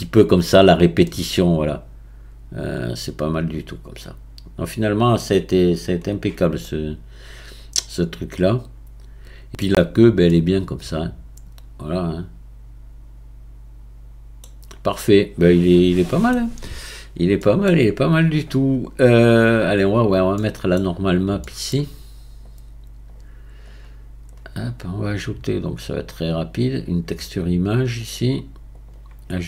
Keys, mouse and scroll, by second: 1.1-4.0 middle drag, 6.6-9.6 middle drag, 10.3-13.4 middle drag, 14.0 middle click, 14.6-15.0 scroll down 1, 15.0-17.0 middle drag, 17.0-17.4 scroll up 3, 17.4-18.3 middle drag, 18.3 click, 19.5-23.8 drag, 28.2-29.4 drag.